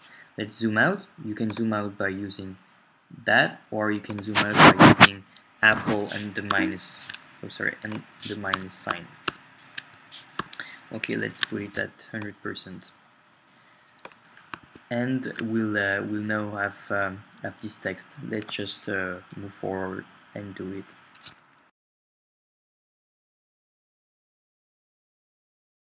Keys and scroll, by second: 6.5 super+-, 14.6 super+Tab, 23.4 shift+o.